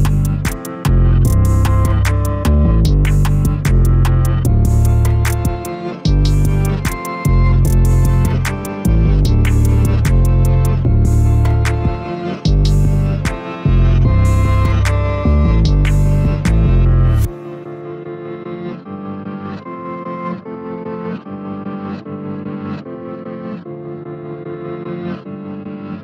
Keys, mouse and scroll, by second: 0.9 click, 1.0 click, 1.3 s, 2.2 g, 4.4 middle click, 5.3 click, 5.5 click, 5.8 g, 8.9-11.4 middle drag, 11.4 KP_Divide, 12.1 middle click, 13.0-13.4 scroll up 2, 13.4 2, 14.0 click, 14.2 click, 15.3 KP_Divide, 15.9-16.3 scroll up 2, 16.3 g, 17.5 s, 18.9 g, 19.7 click, 19.9 click, 20.3 g, 21.3 a, 21.4 a, 21.9-23.6 middle drag, 23.6 KP_Divide, 24.2 middle click, 24.6-25.1 scroll up 2, 25.1 click, 25.2 click, 25.7 ctrl+x.